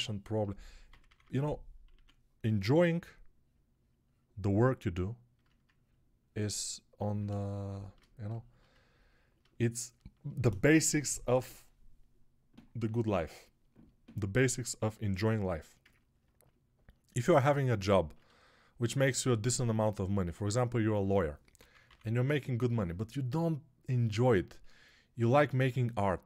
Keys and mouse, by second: 0.0-1.8 typing, 14.0-15.4 shift+right drag, 21.7 ], 21.9 ], 22.0 ].